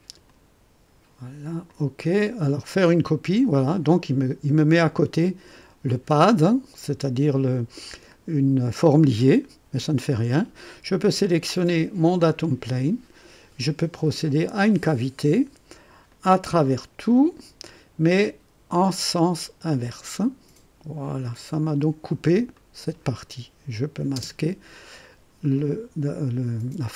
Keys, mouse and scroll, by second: 0.2 click, 1.6 click, 3.0 click, 12.1 click, 14.4 click, 16.0 click, 17.0 click, 19.4 click, 21.4 click, 22.5 click, 23.8 click, 24.1 space, 25.0-26.9 drag.